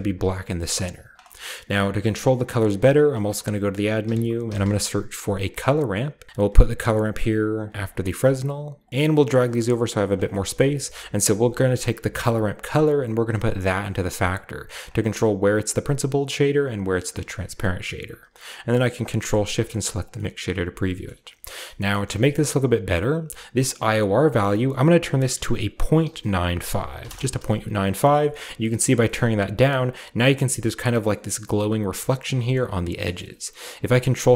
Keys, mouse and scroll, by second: 0.9 middle click, 1.1 click, 2.2-2.9 middle drag, 2.2-3.1 scroll up 1, 2.2-2.8 typing, 3.2 click, 4.0-4.6 typing, 5.5-6.8 drag, 6.9-7.6 drag, 7.7 drag, 8.1-8.8 drag, 8.6-10.2 typing, 8.9 ctrl+alt+Left, 8.9-9.5 ctrl+alt+middle drag, 8.9-9.5 ctrl+alt+scroll down 1, 10.7 middle drag, 11.3 middle click, 15.5 middle drag, 16.0 middle click, 18.5 click, 19.3 ctrl+shift+click, 19.7 click, 20.1 middle click, 20.9 shift+middle click, 21.6 middle click, 21.9 middle click, 22.3-23.5 middle drag, 22.4-23.5 scroll up 1, 24.2 click, 25.5-27.0 typing, 27.0 Return, 28.1 middle click, 29.1-30.8 shift+middle drag, 29.1-30.8 scroll up 1, 31.1-32.3 shift+middle drag, 32.5-32.9 shift+middle drag, 32.9 shift+middle click, 32.9 scroll down 2, 33.2 ctrl+shift+middle click, 33.7-34.3 ctrl+shift+scroll down 1, 33.7 typing.